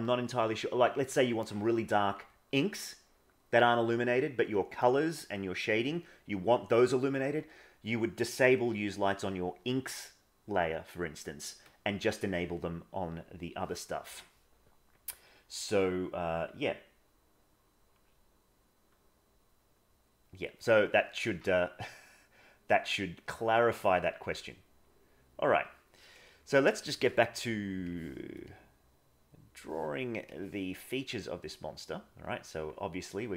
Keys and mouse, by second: 15.6 middle click, 21.8-23.6 drag, 25.0 click, 27.8 click, 28.4-29.6 drag, 30.2 click, 31.7 click, 32.5 click, 33.1 click.